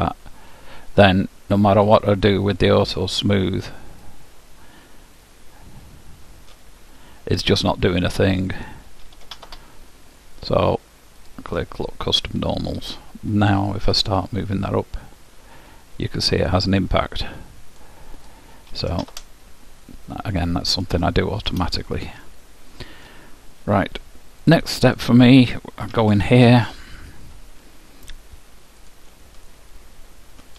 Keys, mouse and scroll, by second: 1.0 middle click, 2.0-6.1 drag, 10.2 click, 10.2-12.3 middle drag, 11.3-13.1 drag, 13.6-14.7 middle drag, 14.7-16.7 drag, 18.2-20.3 drag, 19.9-24.3 middle drag, 25.0-26.8 drag, 26.0 Tab, 28.9-30.5 drag.